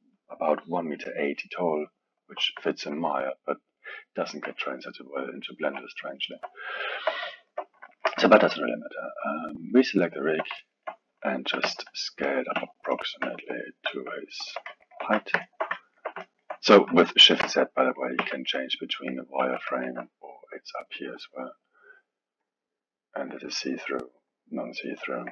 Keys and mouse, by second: 2.7-5.6 alt+middle drag, 5.6 KP_1, 6.2-9.2 ctrl+middle drag, 9.2 click, 9.9-11.6 ctrl+middle drag, 11.6 s, 12.5 s, 13.2 s, 15.0 shift+z, 15.4-17.4 alt+middle drag, 17.4 shift+z, 18.2 shift+a, 19.4 shift+z, 19.9 shift+z, 21.2 click, 21.8 click, 22.4-25.3 drag.